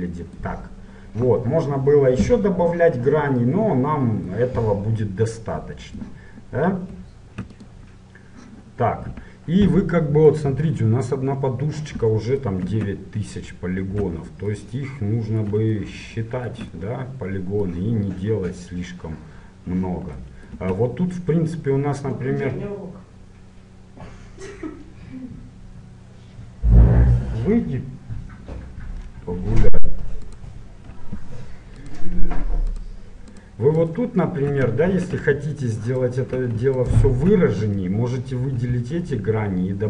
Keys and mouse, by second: 7.6-10.5 drag, 12.9 Tab, 13.8 Tab, 20.7 Tab, 30.4-35.9 right drag, 35.0 ctrl+z, 36.0-38.9 drag, 38.6 ctrl+b.